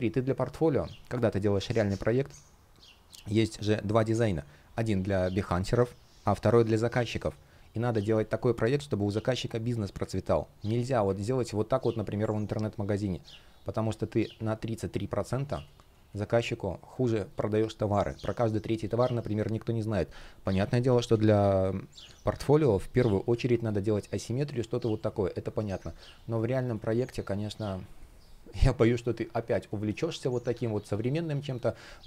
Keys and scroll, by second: 11.4 space, 12.1 shift+p, 15.2 space, 20.2 super+z, 23.2 space, 24.9 space, 25.9 space, 27.2 space, 29.4 shift+p, 30.3 super+z, 30.6 space.